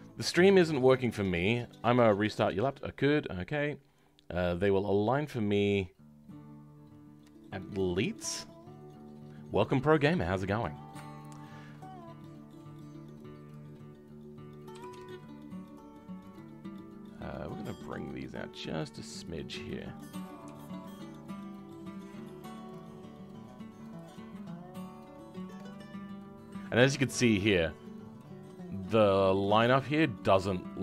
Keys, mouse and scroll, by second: 13.4 click, 19.2 click, 20.4 g, 25.3-30.8 drag.